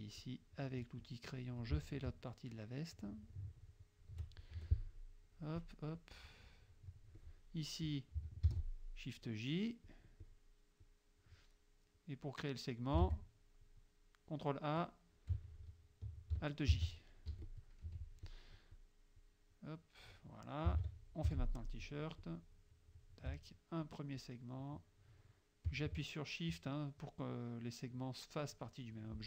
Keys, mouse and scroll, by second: 0.3-1.6 drag, 2.2-4.3 shift+drag, 4.6 shift+F2, 4.9 shift+click, 5.7 click, 6.0 click, 7.2 click, 8.5 shift+j, 9.9 click, 10.9 click, 12.0 click, 13.1 ctrl+a, 16.8 alt+j, 17.4 F1, 17.5 click, 18.3 F2, 18.3 click, 18.8 click, 19.2-20.3 drag, 20.8 ctrl+s, 21.3 ctrl+F6, 22.2-23.3 drag, 24.2-25.9 shift+drag.